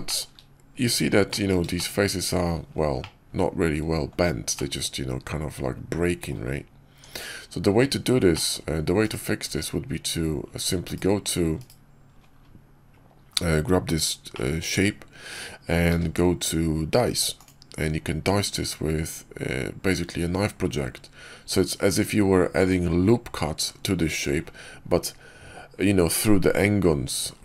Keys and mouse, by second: 0.0 shift+click, 1.2 click, 1.7 shift+middle drag, 2.9-4.0 middle drag, 4.4-6.2 middle drag, 6.8 Tab, 8.2 click, 8.9-11.4 typing, 13.2 KP_5, 14.2-15.2 drag, 15.8 q, 26.7 KP_5.